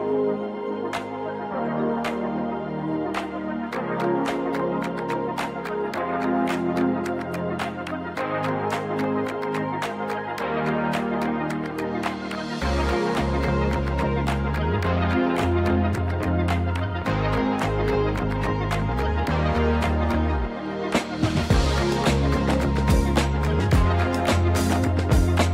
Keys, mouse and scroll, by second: 6.4 click, 9.1 click, 10.1 click, 10.6 click, 11.6 middle click, 23.3 click, 23.7 click.